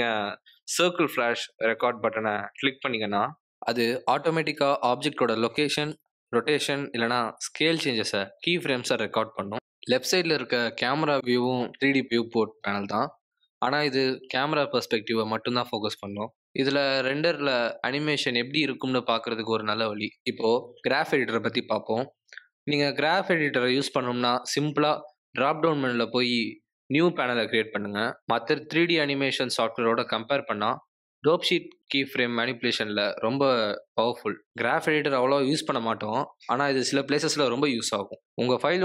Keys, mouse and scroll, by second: 2.3 click, 3.4 g, 4.6-8.8 typing, 8.1 click, 11.4 space, 11.6 r, 12.6 r, 14.1 g, 15.3 click, 16.1 g, 17.3 click, 18.1 space, 22.6 right click, 25.9 click, 28.7 click, 29.1 g, 32.2 click, 32.4 g, 33.8 click, 33.9 g, 34.5 click, 34.8 a, 35.2 s, 36.3 s, 36.7 g, 37.4 space.